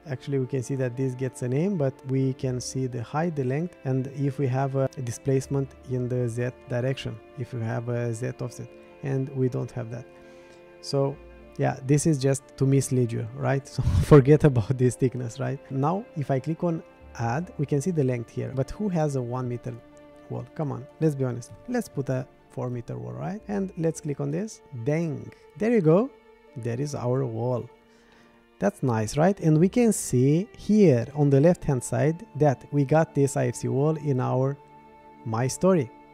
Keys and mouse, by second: 4.5 click, 19.1-24.3 drag, 25.9-27.9 middle drag, 28.1-29.2 middle drag.